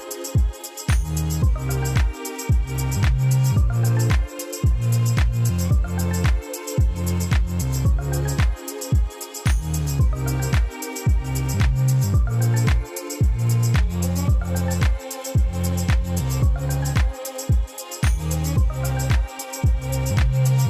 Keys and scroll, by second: 2.6 Tab, 5.8 Tab, 6.6 s, 7.7 Tab.